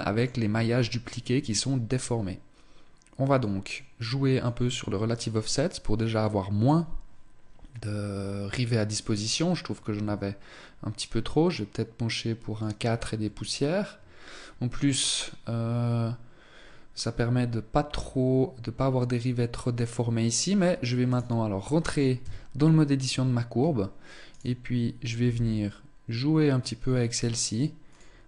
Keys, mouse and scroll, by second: 3.0 click, 4.0 click, 8.8 click, 20.7 right click, 21.8 Tab, 22.6 right click, 23.2-23.8 scroll up 1, 23.9 right click, 24.8 g, 28.2 right click.